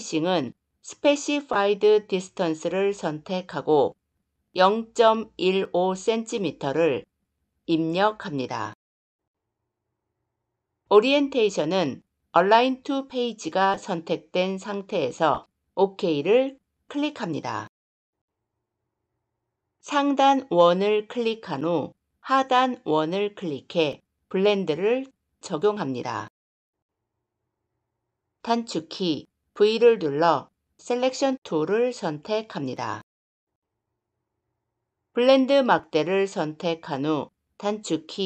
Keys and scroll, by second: 29.3 v.